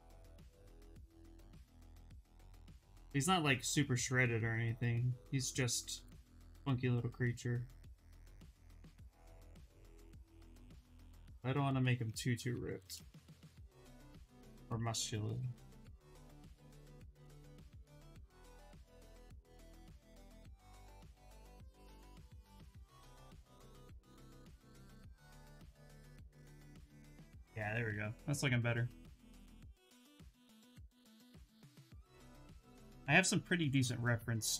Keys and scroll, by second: 3.2 s, 16.7 b, 17.1 v, 17.7 s, 18.9 s, 26.1 s, 29.9 Return.